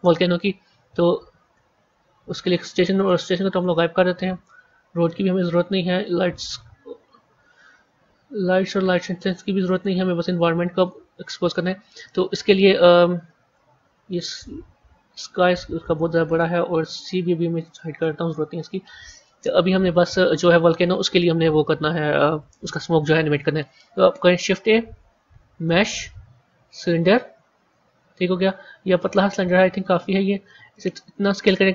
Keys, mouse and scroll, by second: 1.4-2.1 scroll up 9, 2.9 click, 3.5-4.8 scroll down 2, 4.8 click, 6.2 click, 6.6 scroll down 1, 7.1 scroll up 1, 9.1 click, 9.6 click, 10.7 click, 11.9-13.1 middle drag, 13.1-14.0 scroll down 9, 14.0 click, 15.1 scroll down 2, 16.2 click, 17.6 click, 18.1 scroll up 5, 19.1-21.3 middle drag, 21.3 KP_1, 22.2 KP_3, 24.3 shift+a, 28.4-29.5 scroll up 9, 29.5 scroll down 1, 30.5 s.